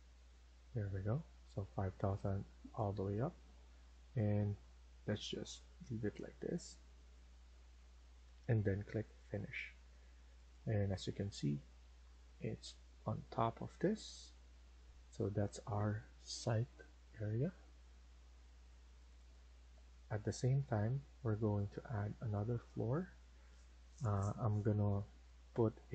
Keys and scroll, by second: 0.2 Return, 0.8 Escape, 1.0 Escape, 1.2 Escape, 11.4 Escape, 11.8 Escape.